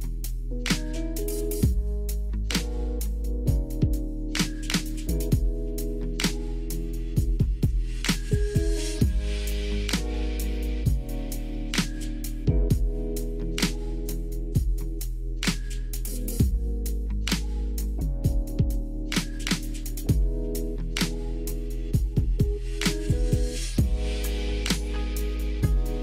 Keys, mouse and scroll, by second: 17.9 middle click, 19.1-19.5 shift+middle drag, 20.3 click, 21.5 middle drag, 22.3-23.0 shift+middle drag, 24.8 Tab.